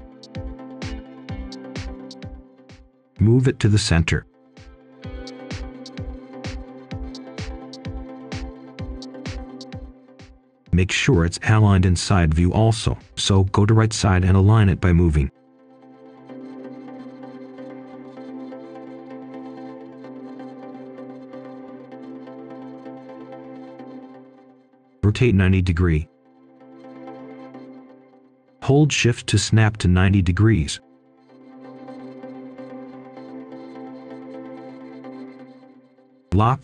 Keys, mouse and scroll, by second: 0.4-1.7 typing, 2.3-4.3 scroll up 1, 4.9 click, 6.0 Return, 6.3-7.4 scroll down 1, 7.4 click, 7.8-9.0 scroll up 1, 9.0 click, 11.9-12.9 scroll up 1, 12.9 right click, 13.9 click, 15.3 Tab, 16.0 click, 21.2 right click, 21.9 click, 23.6-24.3 scroll up 1, 24.4 typing, 24.7 Return, 25.4-26.5 scroll up 1, 26.5 click, 26.8-27.4 scroll down 1, 27.8 shift+click, 30.4 shift+click, 30.9-31.3 scroll up 1, 31.3 right click, 33.4 click, 34.9-36.2 typing.